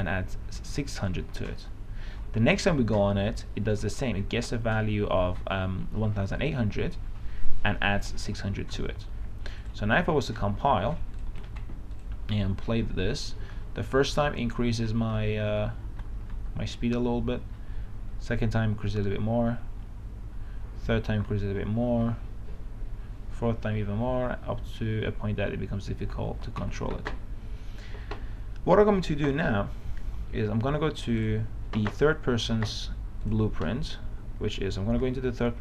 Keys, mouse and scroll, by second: 13.1 w, 21.1 a, 21.9-22.8 w, 23.3 w, 31.8 click.